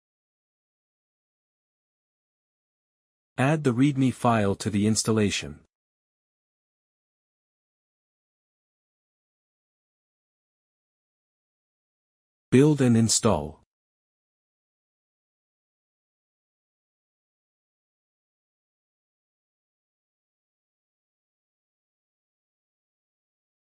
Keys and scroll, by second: 2.3 Return, 3.0 Return, 3.3-6.0 typing, 6.1 ctrl+s, 7.6 BackSpace, 7.8 ;, 8.8 ctrl+s, 13.8 Return.